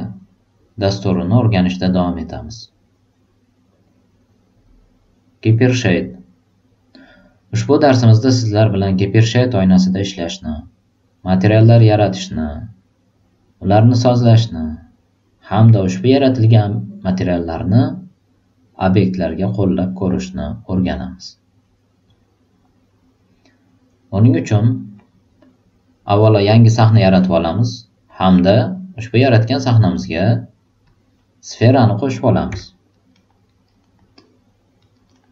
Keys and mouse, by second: 26.2 click, 26.8 click, 30.8 click, 32.5 alt+right click, 33.0 alt+middle click, 33.4 alt+right click, 33.8 alt+middle click, 34.1 alt+click, 34.7 alt+right click.